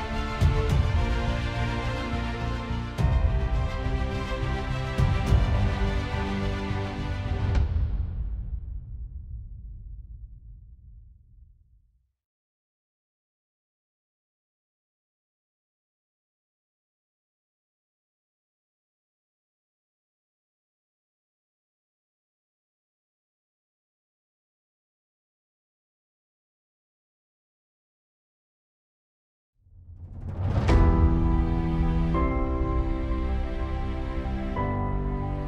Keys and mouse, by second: 0.9 ctrl+z, 11.9 middle click, 21.7 middle click, 25.1 alt+middle click, 29.6 alt+middle click, 32.2 space.